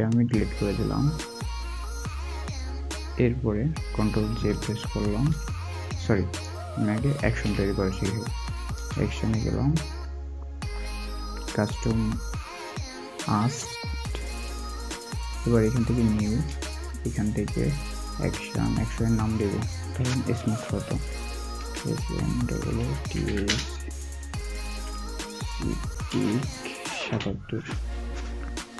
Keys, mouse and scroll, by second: 4.1 alt+w, 5.1 ctrl+j, 7.2 ctrl+z, 21.5-24.6 typing, 25.7-27.5 typing.